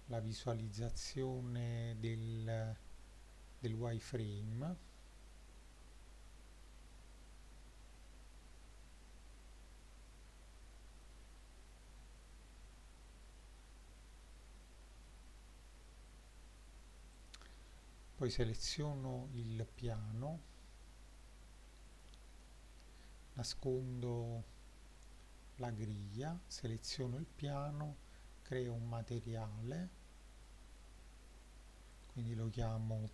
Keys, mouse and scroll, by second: 2.2-4.1 drag, 9.0-11.0 drag, 14.0-15.1 drag, 15.9-17.1 scroll down 4, 17.2 click, 19.8-23.0 drag, 25.0 click, 27.2 click, 30.5 click, 32.0-33.1 drag.